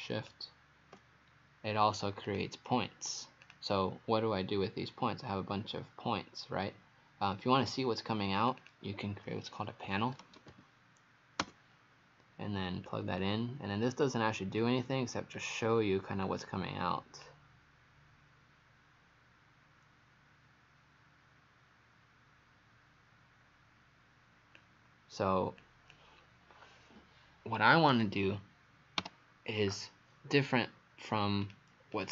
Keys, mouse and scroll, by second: 2.3 click, 7.6-8.0 scroll down 1, 8.4 click, 8.6 click, 9.7-11.0 typing, 11.4 Return, 12.9 click, 28.0 Delete, 30.4 right click, 31.5 click, 32.0 click.